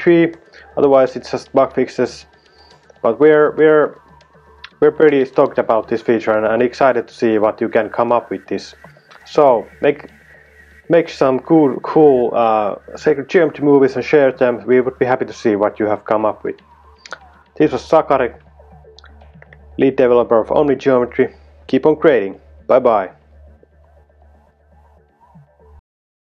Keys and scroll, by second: 18.9 typing.